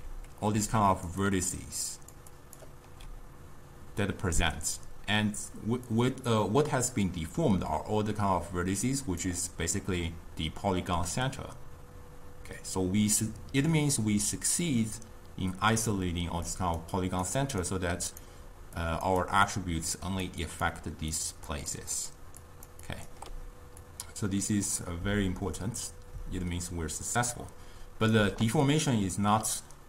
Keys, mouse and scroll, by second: 0.7-2.9 typing, 0.9 click, 1.3 click, 1.9 click, 2.4 click, 5.2 d, 5.9-9.0 drag, 16.4-23.2 typing, 16.6 click, 17.7 right click, 18.9 click, 19.3 click, 20.0 click, 20.5 click, 21.2 click, 21.8 click, 22.5 click, 22.9 click, 23.9-26.9 drag.